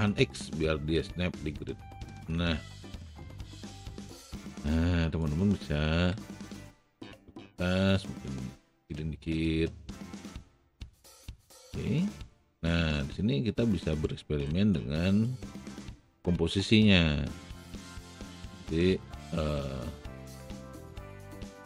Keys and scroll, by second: 0.4 x, 2.6 alt+x, 6.3 r, 19.6 e, 20.5 w.